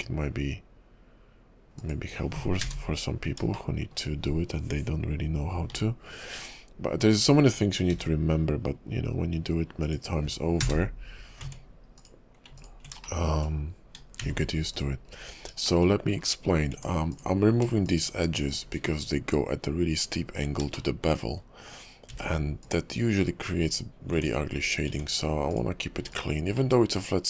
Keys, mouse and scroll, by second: 3.7 shift+middle click, 5.7 k, 11.4 Tab, 11.9 click, 12.6 ctrl+click, 13.2 shift+middle click, 14.2 x, 15.2-15.5 scroll up 3, 15.8 shift+middle click, 16.4 scroll down 3, 16.7 Tab, 17.1 click, 17.8 shift+click, 18.5 shift+click, 18.9-19.7 scroll up 6, 20.9 shift+middle click, 22.1 x, 23.6-24.1 scroll down 6, 24.1 Tab, 24.6 scroll down 2, 24.9 Tab, 25.5 click, 25.9 x, 26.0 x, 26.7 middle click.